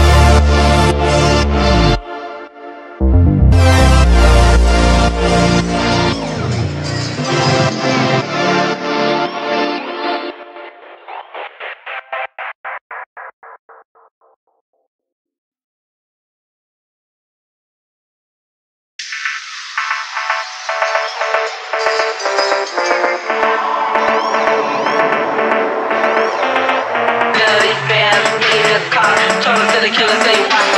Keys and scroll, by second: 14.2 F3, 14.3 Escape, 16.4 ctrl+z, 24.6 F3, 27.5 F3, 27.6 Escape.